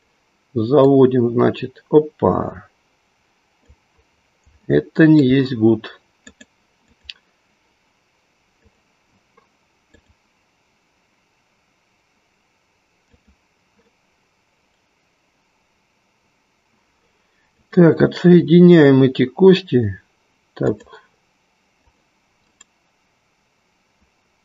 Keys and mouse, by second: 0.0 click, 0.7-4.0 drag, 4.6-5.3 shift+middle drag, 6.3-7.0 drag, 10.0-13.2 drag, 15.2-16.8 right drag, 17.4 click, 20.6 click, 22.7-24.4 right drag.